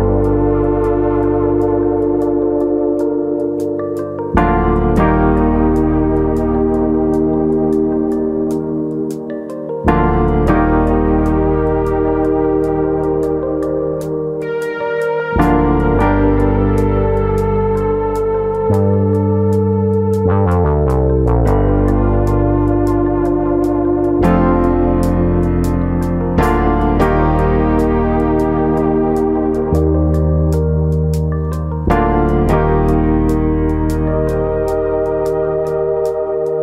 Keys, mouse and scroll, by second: 1.0 click, 1.5 click, 3.1-3.8 scroll up 4, 4.0 scroll up 1, 4.2 ctrl+KP_Add, 4.3 ctrl+KP_Add, 5.3 ctrl+KP_Add, 5.7 ctrl+KP_Subtract, 7.0-7.5 scroll up 2, 7.5 alt+shift+click, 7.5 scroll up 1, 8.5-9.4 scroll down 5, 9.4 s, 10.6 click, 11.4 click, 16.3 click, 17.0-19.0 scroll down 3, 19.0 click, 19.0-19.6 scroll down 1, 19.6 click, 22.0 scroll down 1, 22.5 ctrl+z, 22.8 ctrl+z, 23.8 ctrl+z, 25.0 Tab, 27.8-28.8 scroll up 1, 28.8 click, 29.3 shift+middle click, 29.6-30.2 scroll up 2, 30.2 Tab, 30.5 shift+middle click, 30.8 middle click, 31.0 scroll up 1, 31.7 click, 32.3 ctrl+KP_Add, 33.1 ctrl+KP_Add, 36.0 ctrl+KP_Add, 36.0 ctrl+z.